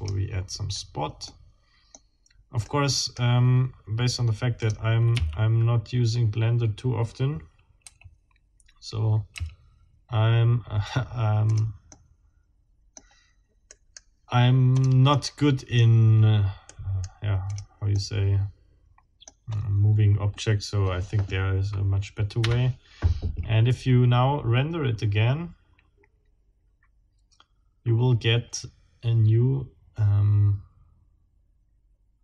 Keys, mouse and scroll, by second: 0.6 scroll down 2, 1.3 middle click, 2.6 middle click, 4.6 click, 5.1 r, 7.8 y, 9.4 x, 11.5 click, 11.9-13.2 drag, 13.7-14.1 right drag, 14.7 click, 15.1 middle click, 16.7-17.2 right drag, 17.4 click, 18.0-19.4 middle drag, 22.4 F12.